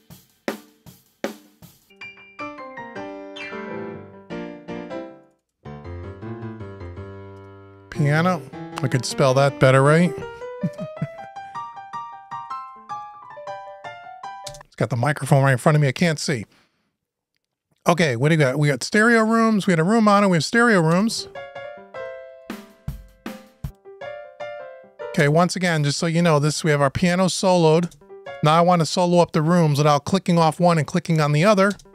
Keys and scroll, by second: 10.3 shift+BackSpace, 13.6 Return.